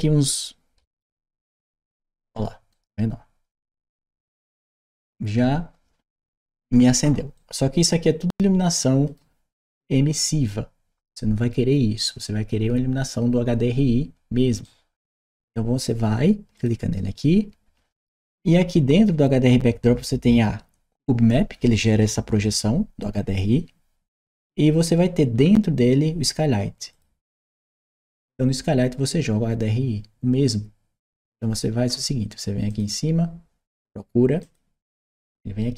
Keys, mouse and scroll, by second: 1.5 Return, 2.5-5.2 right drag, 7.2-9.0 right drag, 14.4-15.6 right drag, 16.4 click, 25.2-26.7 middle drag, 25.2 scroll up 1, 26.7 click, 31.6 middle click, 32.5 click, 34.2 click.